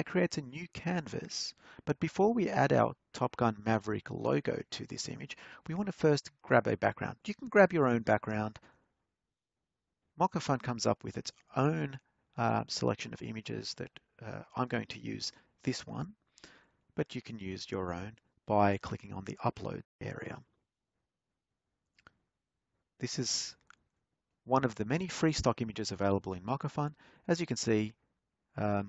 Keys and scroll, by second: 5.6-7.2 typing, 8.8 Return, 27.0 alt+Tab.